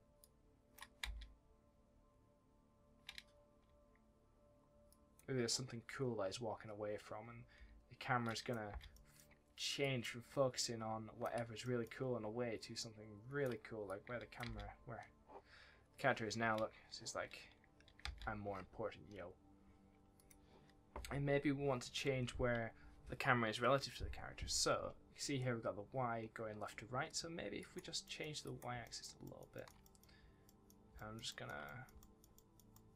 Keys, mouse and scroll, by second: 1.0 space, 2.3 scroll down 1, 4.8 click, 8.2 click, 8.6 space, 8.9 middle click, 9.4-9.8 scroll up 1, 9.8 click, 10.5 shift+click, 11.5 middle click, 13.8 click, 14.4 space, 18.0 space, 20.1 click, 21.1-23.1 scroll down 1, 27.2 scroll down 1, 27.5 click, 28.0 middle click, 28.4 click, 28.8 shift+middle click, 29.8 middle click, 30.2 scroll down 1, 30.4 middle click, 31.6 middle click, 31.9 shift+middle click.